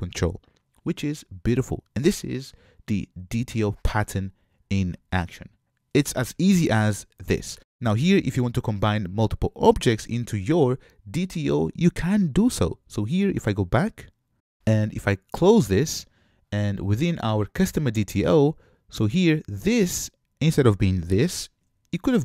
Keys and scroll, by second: 21.3 super+x.